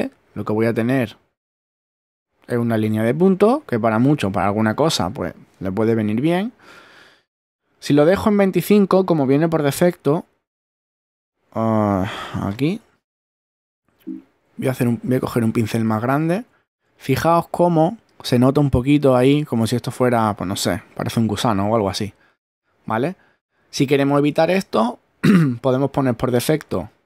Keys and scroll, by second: 6.3 super+z, 12.6 Right, 13.8 shift+Up, 15.6 shift+<, 24.4 super+z.